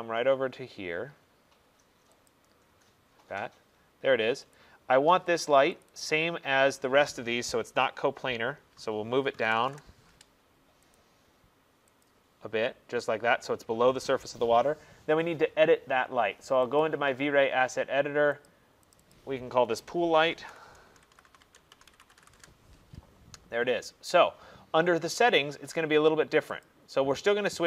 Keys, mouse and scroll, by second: 1.6 middle click, 2.4 click, 3.0-3.5 scroll, 4.6 click, 5.9 click, 6.1 click, 7.0-7.4 scroll, 7.9-9.5 scroll, 9.5 scroll, 9.5 typing, 11.0 click, 12.1 click, 12.2 Return, 16.9 click, 18.5 click, 19.0 click, 19.2 click, 20.4 ctrl+a, 20.9-22.4 typing, 25.0-27.1 typing, 26.7 click.